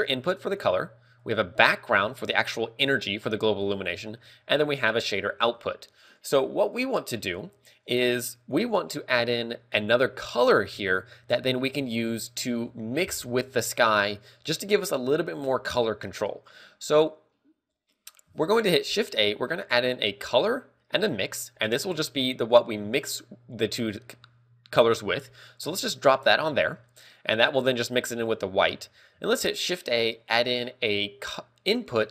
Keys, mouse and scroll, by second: 1.5 click, 19.2 shift+a, 26.1 click, 26.4 middle click, 28.1 middle click, 29.6 shift+a.